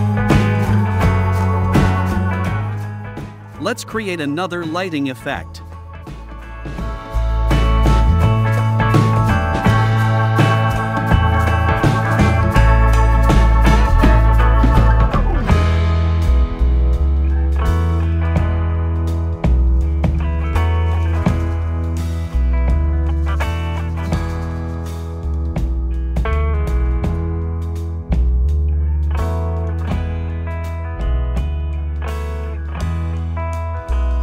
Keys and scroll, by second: 7.8 q, 10.2 a, 14.0 super+j, 14.5 v, 22.3 v, 25.0 shift+Up, 26.2 shift+Down, 27.0 i, 28.6 v.